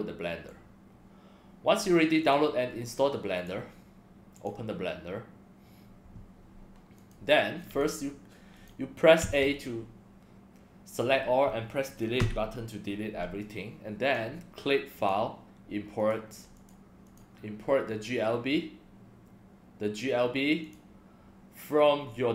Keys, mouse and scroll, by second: 0.5-1.8 drag, 2.2 click, 3.4 click, 4.3 click, 7.0 click, 7.7 click, 8.6 click, 12.2 Delete, 13.4-14.1 drag, 15.0 click, 16.0 click, 16.6 click, 17.0 click, 20.6 click.